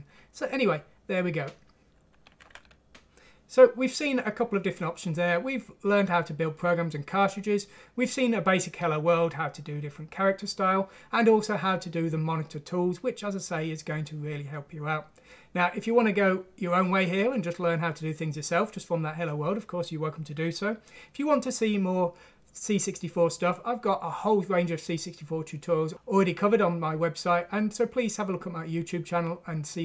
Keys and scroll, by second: 1.9 F11.